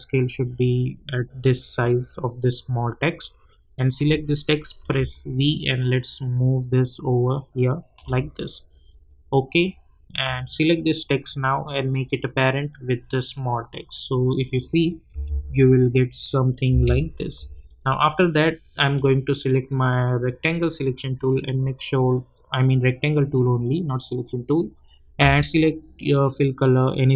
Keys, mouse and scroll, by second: 15.3 space, 17.6-20.4 drag.